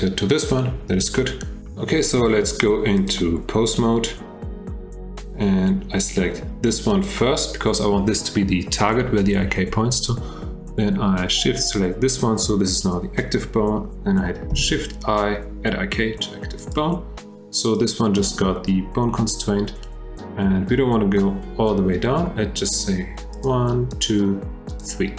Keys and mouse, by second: 3.1-3.8 drag, 7.0 click, 14.5 shift+i, 23.4 click, 23.9 click, 24.8-25.1 drag.